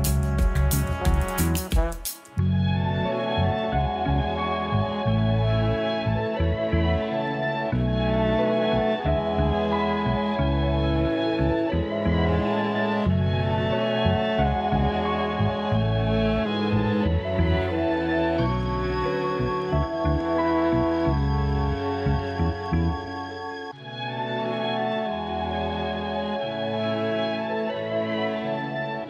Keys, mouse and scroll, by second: 2.7 Delete, 3.1 click, 3.8 shift+a, 7.4 shift+a, 10.6 BackSpace, 10.7 BackSpace, 14.6-16.3 scroll up 3, 16.3 click, 20.9-21.7 drag, 26.2 click, 26.6-28.3 middle drag, 28.3 click.